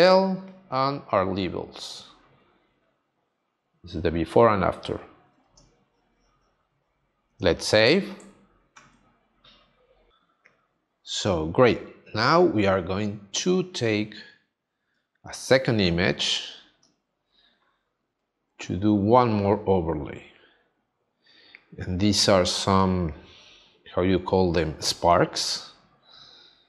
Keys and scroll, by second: 5.5 space, 8.7 super+s, 22.8 space.